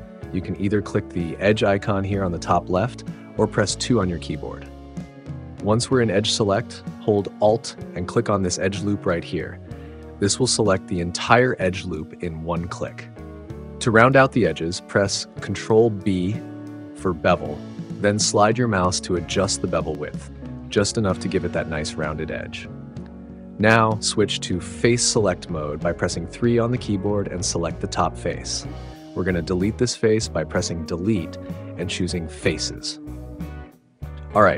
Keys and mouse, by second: 9.9 alt+click, 13.1 click, 15.7 ctrl+b, 20.4 click, 26.2-28.4 drag, 31.6 Delete.